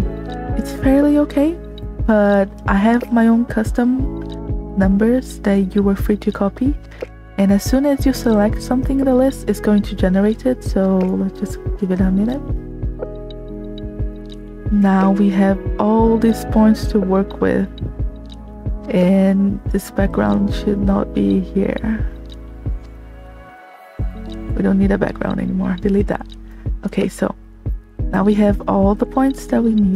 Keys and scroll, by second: 26.2 space.